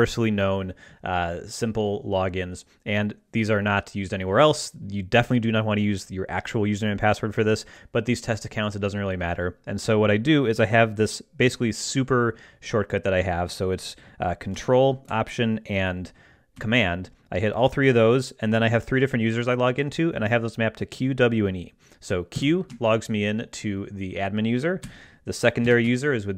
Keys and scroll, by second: 22.3 ctrl+alt+super+q, 25.6 ctrl+alt+super+w.